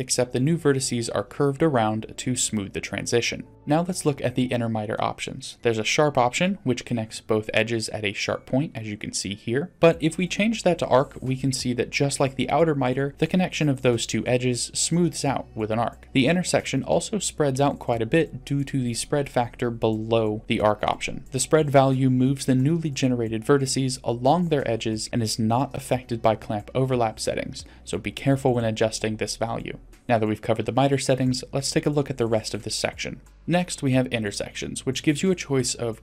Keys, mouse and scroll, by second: 3.5 middle click, 3.5 scroll down 2, 7.1-7.6 scroll up 2, 7.6 d, 8.0 click, 8.7-9.0 d, 9.0 right click, 9.4 d, 9.7 click, 16.0 shift+middle click, 16.0-16.5 scroll up 1, 17.8-20.5 drag, 21.0 scroll up 2, 21.2 middle click, 22.1 click, 22.6 scroll up 2, 22.9 click, 23.2 click, 23.6 click, 24.0 click, 24.4 click, 24.9-25.3 scroll down 2, 25.4-25.8 shift+middle drag, 27.1-27.8 scroll down 2, 30.0 click, 30.7 click, 31.3 click, 31.7 click, 32.2 click, 33.2 shift+middle click, 33.2-34.5 scroll up 1, 35.1-36.0 drag.